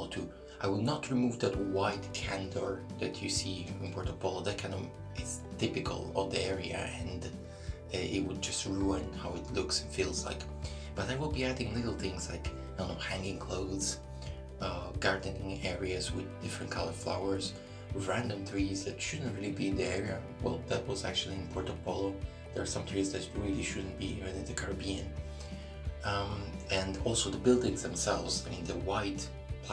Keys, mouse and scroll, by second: 5.2 shift+middle click, 5.7-6.1 scroll up 1, 6.1 shift+middle click, 14.9 shift+middle click, 15.9 shift+middle click, 17.3 ctrl+r, 19.6 shift+middle click, 20.2 scroll up 1, 20.8 shift+middle click, 21.6 right click, 22.8 click, 24.4 right click, 25.0 shift+right click, 25.4 middle click, 27.1 middle click, 27.5 scroll up 1, 28.6 shift+right click.